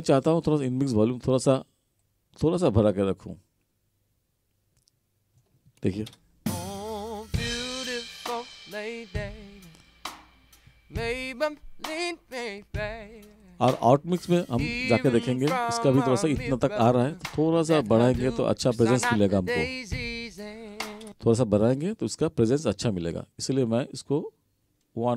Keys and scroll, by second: 6.2 space, 21.1 space.